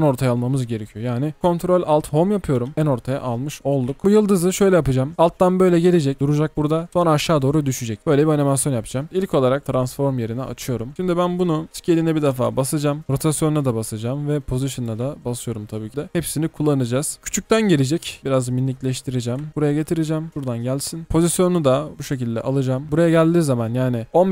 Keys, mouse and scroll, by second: 2.6 ctrl+alt+Home, 2.7 ctrl+alt+Home, 3.3-4.5 typing, 9.0-9.7 typing, 9.6 double click, 10.5-11.7 scroll down 1, 17.2 double click, 19.5 alt+scroll up 1, 23.3-24.3 alt+scroll down 1.